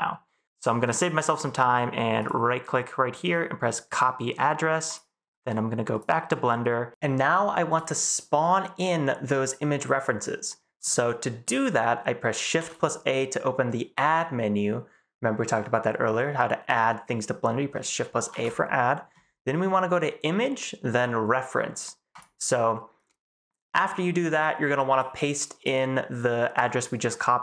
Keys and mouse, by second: 8.3-8.9 middle drag, 9.3-10.0 middle drag, 10.4-10.8 middle drag, 11.5 middle drag, 12.5 shift+a, 18.3 shift+a.